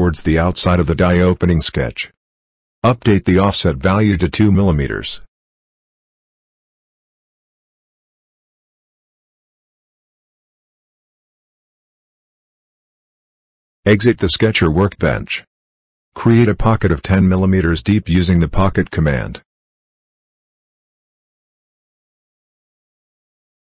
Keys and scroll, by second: 6.5 -, 9.2 2, 10.7 Return, 22.4 1, 22.6 0.